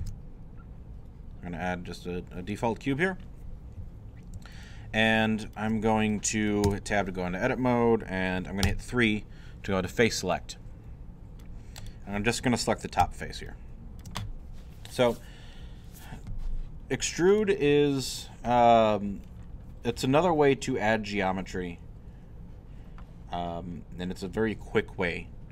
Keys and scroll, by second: 6.6 shift+Tab, 8.6 3.